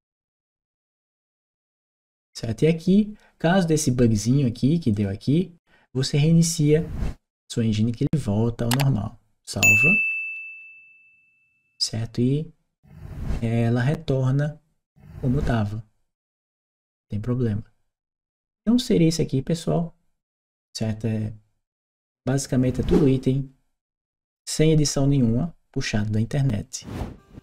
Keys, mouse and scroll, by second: 0.2 click, 3.8 right click, 4.7 click, 9.2 click, 10.3 click, 18.3-21.5 right drag.